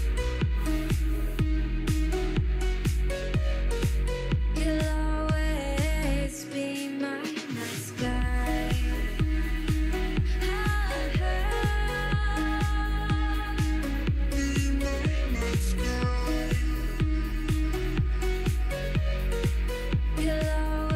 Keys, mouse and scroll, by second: 0.4 g, 2.0 alt+z, 2.2-3.5 middle drag, 3.5 ctrl+r, 4.1 middle click, 4.7 ctrl+r, 5.5 scroll down 2, 5.7 middle click, 6.0-7.2 shift+middle drag, 8.2 KP_3, 8.6 alt+z, 9.0-9.4 scroll up 2, 9.4 click, 10.0 l, 10.1 middle click, 10.5 l, 10.8 KP_3, 11.2 shift+scroll down 1, 11.2 shift+middle click, 11.6-11.9 scroll up 1, 11.9 shift+d, 14.0 alt+z, 14.1-15.5 middle drag, 16.7 x, 17.1 KP_3, 17.9 KP_1, 18.1-18.4 scroll down 2, 18.4 click, 19.1-20.9 typing.